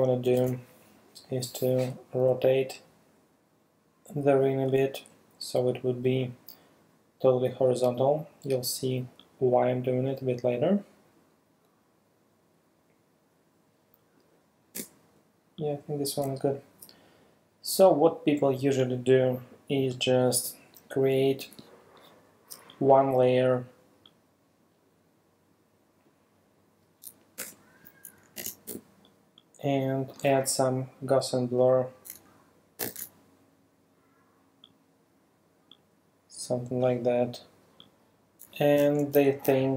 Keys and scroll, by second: 0.3 super+t, 4.4 space, 14.8 Return, 20.8 space, 27.4 alt+BackSpace, 28.2 alt+super+BackSpace, 28.4 alt+super+d, 28.7 super+v, 29.5 v, 32.8 super+b, 38.8 super+t, 39.4 alt+super+t.